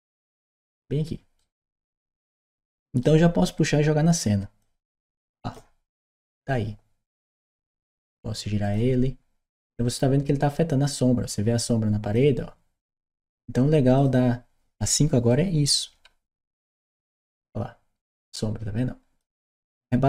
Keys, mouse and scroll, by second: 1.2-2.8 right drag, 4.4 click, 6.9 click, 8.5 click, 9.6-12.0 drag, 13.8-15.2 drag, 15.2-16.4 right drag, 17.0-19.0 drag, 19.3-20.0 right drag.